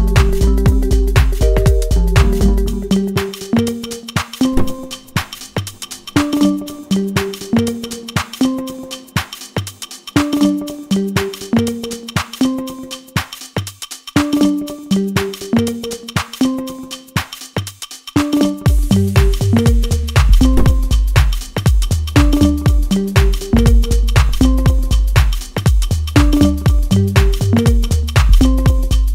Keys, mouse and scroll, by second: 6.4 click, 16.6 click, 20.0 8, 20.4 Return, 25.6-29.1 drag.